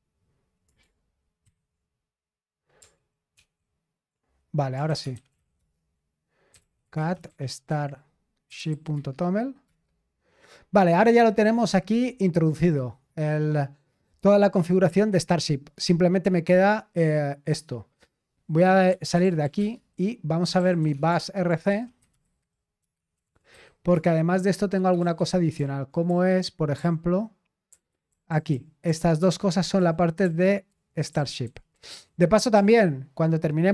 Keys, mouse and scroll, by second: 0.0-0.1 typing, 1.4 Return, 1.4 typing, 3.3 ctrl+v, 5.3 ctrl+d, 5.3-10.9 typing, 18.6-32.5 typing.